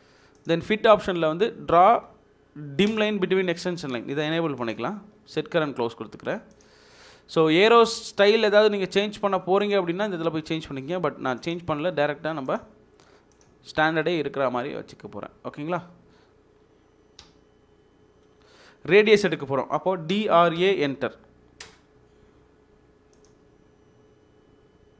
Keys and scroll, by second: 17.2 typing, 20.0-21.6 typing.